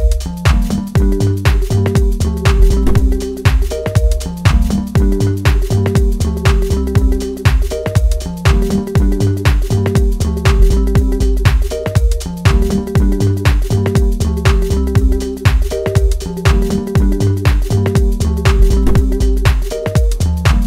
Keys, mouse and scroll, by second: 6.3-7.2 scroll up 4, 7.2 scroll down 2, 7.4 shift+middle click, 7.8-8.2 scroll up 2, 8.2 scroll down 1, 9.4-10.7 drag, 10.7 scroll down 1, 11.4 click, 11.9-12.3 scroll down 2, 12.3-14.0 drag, 15.8-17.8 drag, 18.4-20.1 drag.